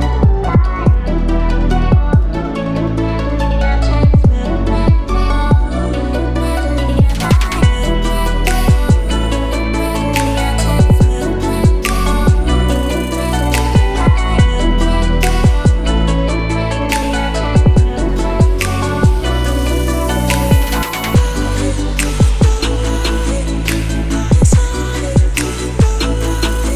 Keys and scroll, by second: 21.8-25.5 typing, 25.5 Return.